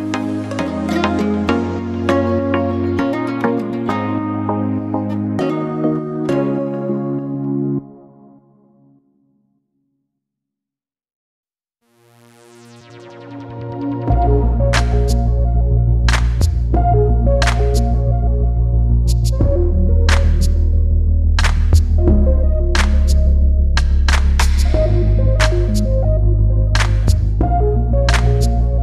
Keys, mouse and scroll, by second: 0.1 shift+click, 0.4-0.8 scroll down 2, 0.8 click, 1.5 e, 2.0 Tab, 2.1 scroll down 1, 2.8 click, 3.0 click, 3.3 Tab, 3.7 click, 4.2 scroll up 1, 4.4 click, 4.8 2, 4.9 click, 5.3 shift+click, 5.7 shift+click, 5.9 shift+click, 6.6 scroll up 1, 6.7 scroll down 2, 7.4 click, 8.2 click, 8.7 e, 10.7 click, 11.9 click, 12.0-12.7 scroll down 3, 12.8 click, 13.1 scroll up 4, 13.5 click, 13.8 shift+click, 14.1 scroll down 2, 14.3 e, 16.6 scroll down 2, 16.9 Tab, 17.0 scroll up 3, 17.3 Tab, 17.5 click, 17.8 shift+click, 18.2 shift+click, 18.4 shift+click, 18.7 r, 19.5 g, 20.9-21.2 scroll down 4, 21.2 scroll up 4, 21.4 Tab, 21.6 click, 22.0-22.7 scroll down 1, 22.7 g, 23.2 Tab, 23.3 scroll down 2, 23.4 scroll up 3, 23.6 scroll down 2, 23.7 scroll up 1, 24.4 click, 24.6 click, 25.2 Tab, 25.6 click, 25.9 click, 26.1 shift+click, 26.4 shift+click, 27.0 shift+click, 27.1 shift+click, 27.6 g, 28.5 Tab, 28.7 scroll up 2.